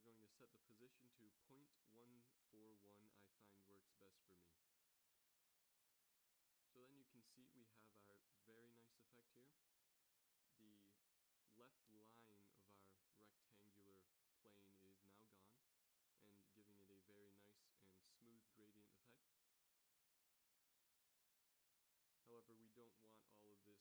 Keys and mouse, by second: 3.2-5.3 middle drag, 5.1 shift+z, 5.7 middle click, 9.8-10.9 middle drag, 20.7 middle click, 21.6-23.6 middle drag.